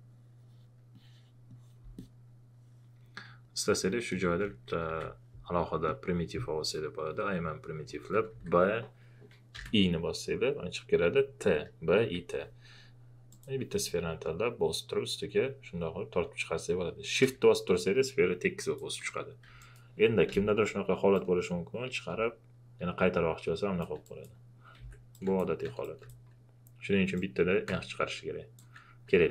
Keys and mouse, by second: 4.9 b, 5.8 click, 8.3 b, 9.5 i, 13.3 i, 13.3-19.6 drag, 20.3 ctrl+z, 21.1-24.0 drag, 24.0 click, 24.7 ctrl+z, 25.1 click, 25.8 click, 27.1-29.3 drag.